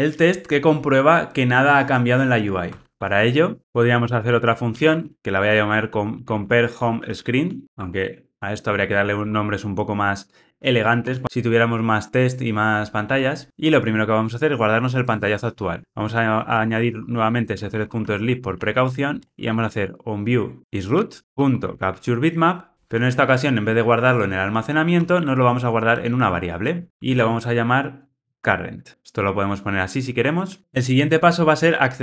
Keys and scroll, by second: 13.0 Return, 16.2 Return, 21.2 Tab, 21.5 Tab, 22.5 Return, 26.8 Return.